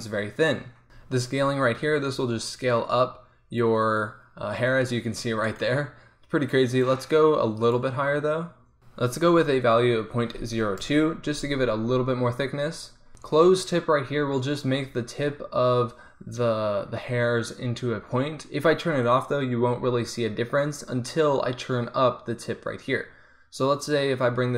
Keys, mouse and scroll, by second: 1.8-4.1 drag, 6.8-8.8 drag, 19.2-21.0 drag, 22.5-24.4 drag.